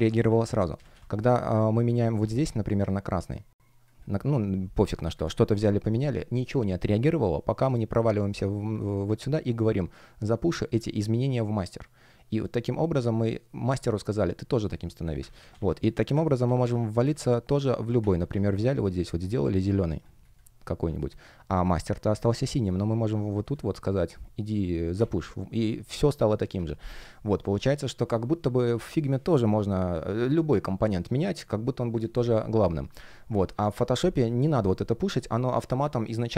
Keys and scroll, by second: 0.7 super+z, 15.1 super+z, 16.1 super+z.